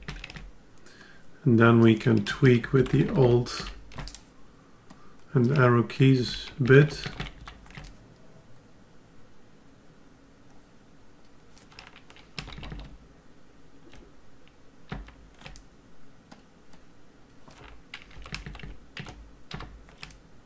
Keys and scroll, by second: 2.4 alt+Left, 6.3 alt+Down, 7.4 alt+Left, 12.3 alt+Up, 18.1 alt+Down.